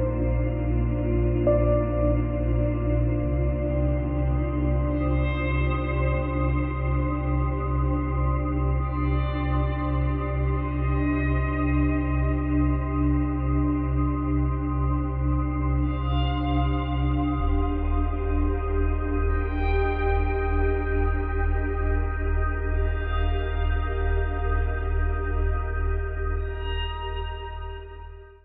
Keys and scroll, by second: 3.4 space, 9.2 space.